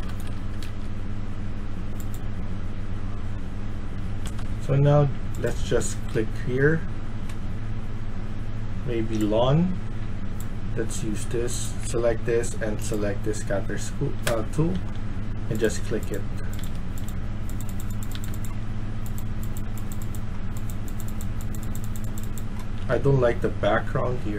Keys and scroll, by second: 0.3 Escape, 0.6 Escape, 3.9-4.6 typing, 13.7-15.2 typing, 16.2-17.0 typing, 18.0 d, 20.7 d, 22.4-24.3 typing.